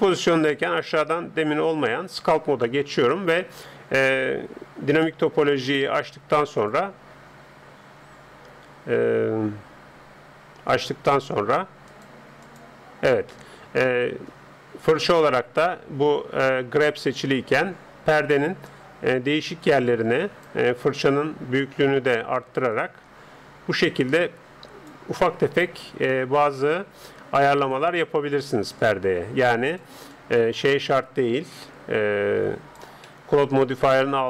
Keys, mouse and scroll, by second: 0.5-2.3 drag, 2.7-8.3 middle drag, 5.5-8.5 drag, 11.9-13.7 drag, 13.3-17.5 middle drag, 18.7-20.4 drag, 21.0 f, 22.7-24.4 drag, 25.2-29.7 middle drag, 26.6-28.2 drag, 28.9-32.6 drag, 33.2-34.2 middle drag.